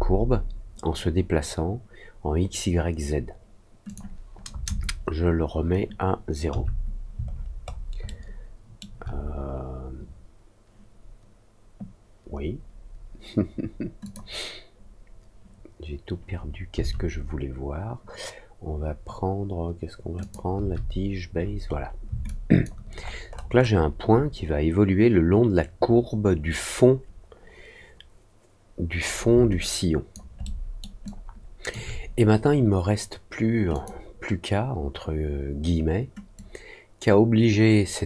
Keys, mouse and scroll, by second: 3.8 click, 7.2-7.8 alt+scroll up 2, 8.0 alt+middle click, 14.0 click, 20.1 click, 21.3 middle click, 21.3-21.8 scroll down 2, 21.6 middle click, 22.2 alt+click, 22.9 alt+middle click, 22.9-23.8 alt+scroll up 3, 29.5 alt+click, 30.4 alt+middle click, 31.0 alt+click, 33.7 click, 36.3-38.0 drag.